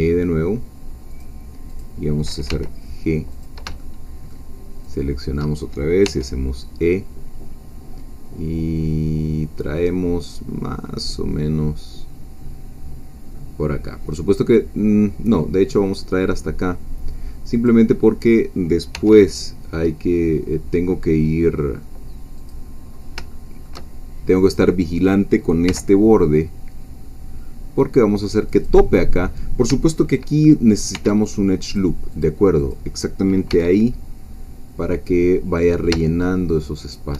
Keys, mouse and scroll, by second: 1.1 click, 1.8 click, 2.5 g, 3.3 click, 3.8-4.8 shift+middle drag, 4.8 shift+click, 6.1 e, 17.5 click, 18.9 e, 22.4 click, 22.8 scroll up 1, 23.3 shift+middle click, 24.4 click, 25.7 g, 28.5 click, 30.9 ctrl+r, 31.6 click, 32.1 click, 33.5 g, 36.8 shift+click.